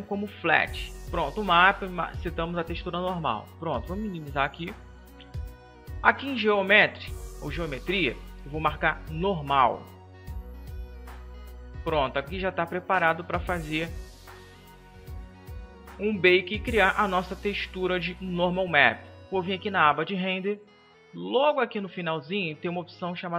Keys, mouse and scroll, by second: 8.7-23.3 drag.